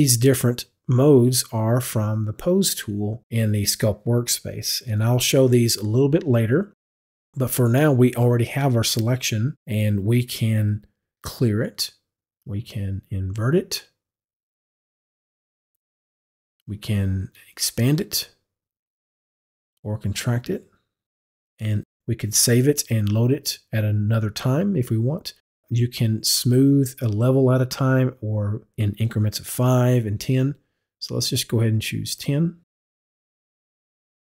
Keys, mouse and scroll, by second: 13.4 click, 15.4 click, 17.5 click, 19.9 click, 32.1 click.